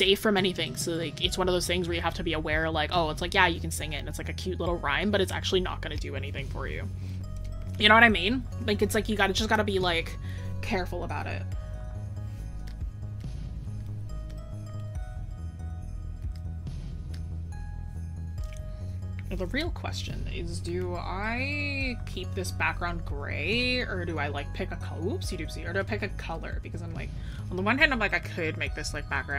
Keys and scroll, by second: 7.7 scroll down 1, 8.5 scroll up 1, 11.5 scroll down 1, 11.9 scroll up 1.